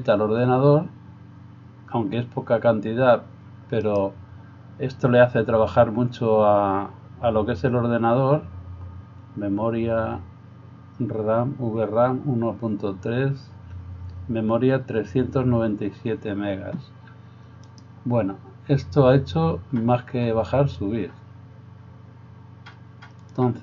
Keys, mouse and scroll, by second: 3.9 right click, 17.7 right click.